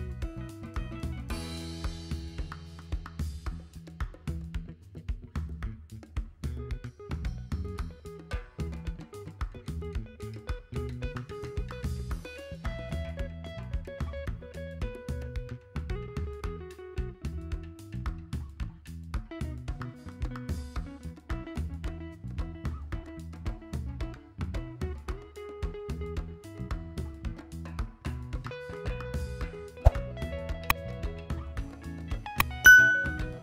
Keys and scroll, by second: 3.7 z.